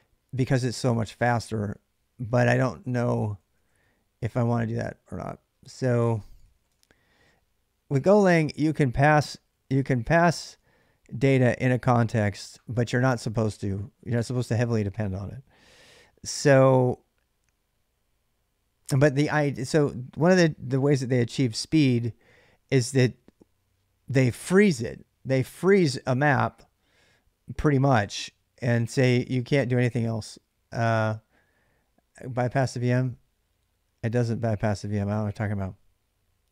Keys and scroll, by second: 0.7 ctrl+a, 0.9 ctrl+a, 3.1 ctrl+a, 5.8-6.9 typing, 8.8-11.6 typing, 14.0 space.